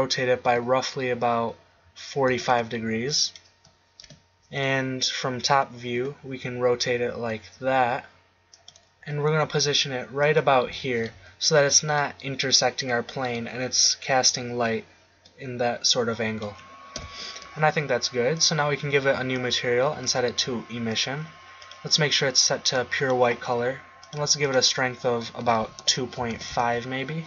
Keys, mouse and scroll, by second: 0.6 r, 4.0 KP_7, 5.9 r, 8.6 click, 9.0 g, 10.2 click, 10.8 middle click, 11.1 z, 16.9 KP_7.